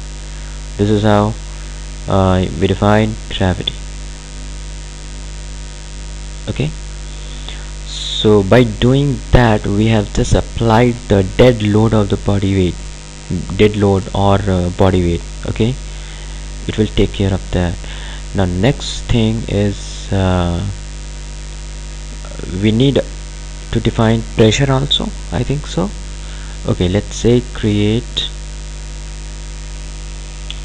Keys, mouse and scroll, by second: 9.4 click, 21.9 click, 27.6 click, 30.3-30.6 typing.